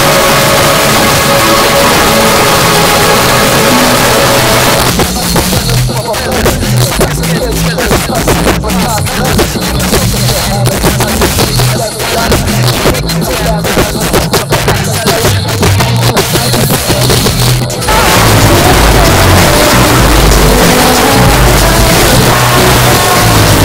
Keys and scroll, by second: 4.8 Page_Down.